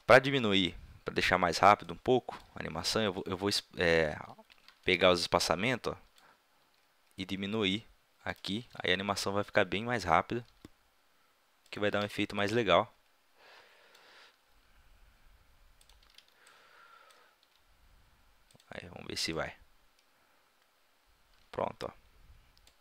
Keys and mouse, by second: 0.8 middle click, 1.8-3.6 drag, 3.6-4.8 middle drag, 4.6 a, 4.8 b, 6.6 g, 8.6 a, 8.8 b, 10.0-10.4 drag, 10.5 g, 11.9 a, 12.1 b, 14.4 g, 16.0 a, 16.2 b, 17.5 g.